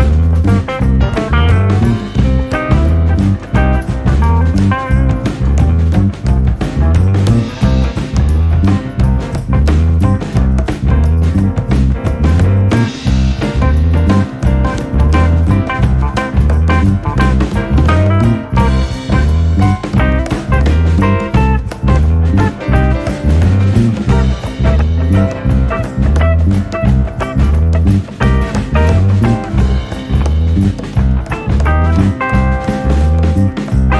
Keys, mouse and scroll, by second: 3.3-3.8 scroll up 2, 4.6-5.5 scroll down 1, 5.5-8.1 shift+middle drag, 8.1-10.5 scroll up 2, 12.6 Tab, 15.1 click, 15.6 scroll down 2, 15.8-18.5 middle drag, 18.5 click, 20.1 click, 21.6 click, 25.5 click, 28.6-31.5 middle drag, 32.2-33.0 shift+middle drag, 33.0-33.6 scroll up 1, 33.6-33.9 middle drag.